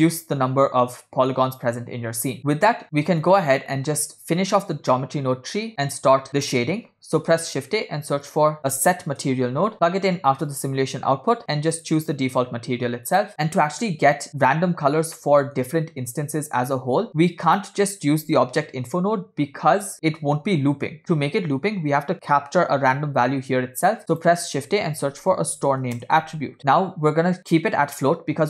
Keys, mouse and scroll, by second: 2.5 middle click, 3.4-4.8 drag, 5.1 middle click, 7.2 shift+a, 11.4 scroll up 2, 12.1-13.3 drag, 14.3-14.6 scroll up 3, 15.3-15.8 shift+middle drag.